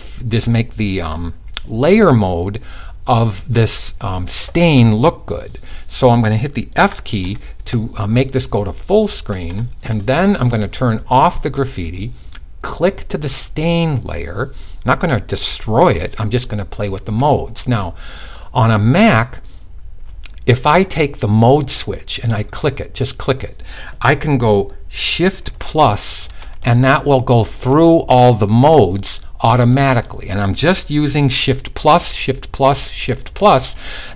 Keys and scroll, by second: 6.4 f, 27.2 typing.